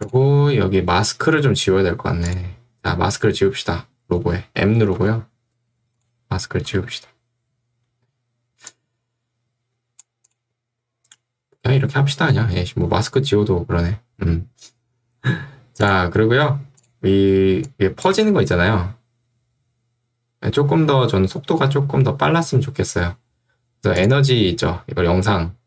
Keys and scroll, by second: 5.0 m, 18.2 space, 21.0 space.